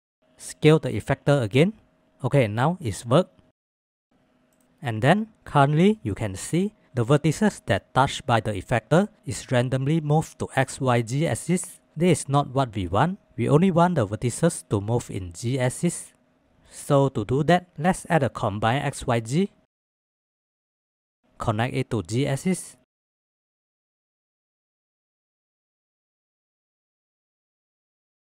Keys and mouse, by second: 3.6 ctrl+z, 4.1 ctrl+s, 5.0-17.5 middle drag, 24.7 KP_1, 26.4-27.5 shift+drag, 27.8 shift+click, 28.1-28.2 drag.